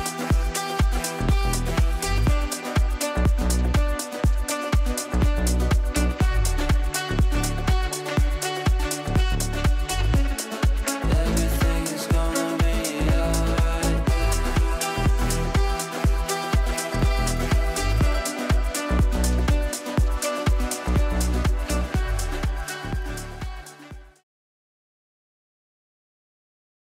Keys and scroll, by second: 24.0 ctrl+z.